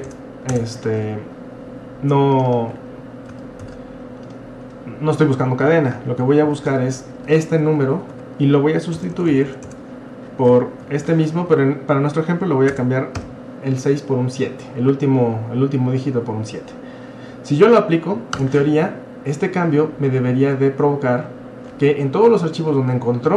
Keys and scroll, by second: 0.0-0.2 typing, 3.6 ctrl+c, 6.5 ctrl+v, 7.3 Right, 7.5 Right, 7.6 Right, 7.8 Right, 9.0-9.7 typing, 10.9 ctrl+v, 12.7 BackSpace, 13.2 7, 18.3 Return.